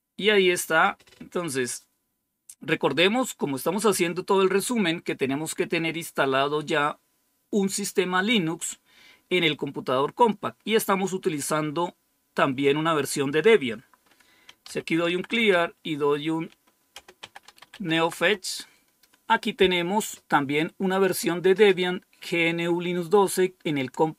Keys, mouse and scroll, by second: 14.3-18.1 typing.